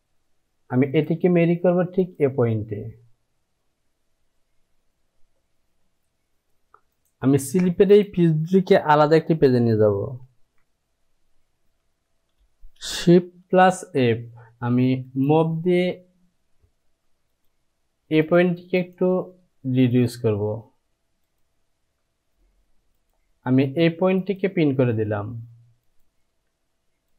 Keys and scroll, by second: 4.9 j, 10.3 shift+i, 11.4 |, 13.5 shift+f, 13.8 shift+f.